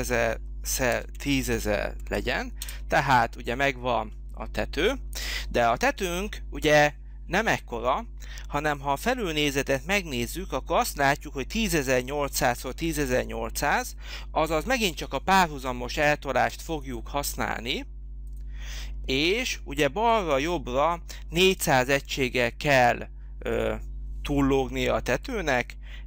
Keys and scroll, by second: 0.0-1.6 typing, 2.6 Return, 25.4 4.